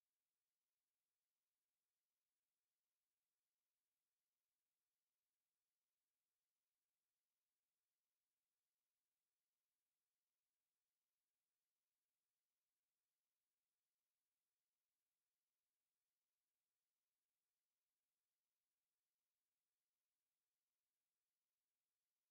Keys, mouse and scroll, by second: 2.5 click, 3.2-3.5 scroll down 1, 4.7 click, 5.7-7.3 drag, 8.9 click, 10.2 click, 11.7 click, 14.1 click, 15.5 click, 16.3 click, 16.7 right click, 17.7 click, 19.1 click, 20.5 KP_2, 20.7 KP_Decimal, 20.9 KP_5.